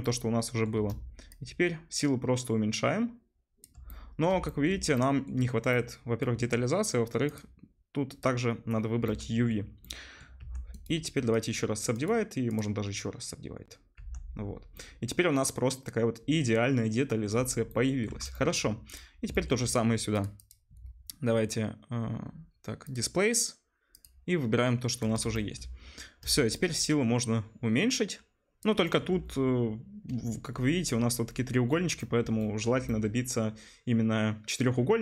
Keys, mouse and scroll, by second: 10.4 Tab, 14.2 Tab, 14.3 middle click, 14.9 middle click, 15.2 middle click, 15.4-16.9 middle drag, 17.6-18.9 middle drag, 18.9 click, 19.0-20.2 middle drag, 20.2 click, 20.5-35.0 middle drag.